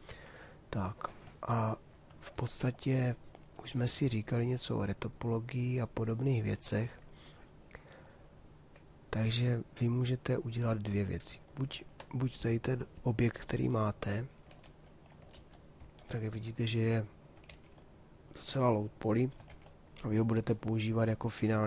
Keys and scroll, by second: 14.2 shift+d, 17.5 shift+f.